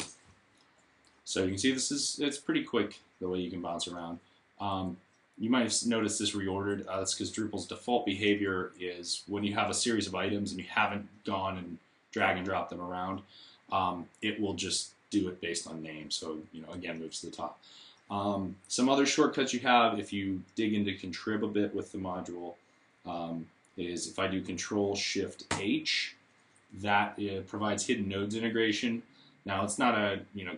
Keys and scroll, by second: 0.0-0.1 typing, 25.3 ctrl+h.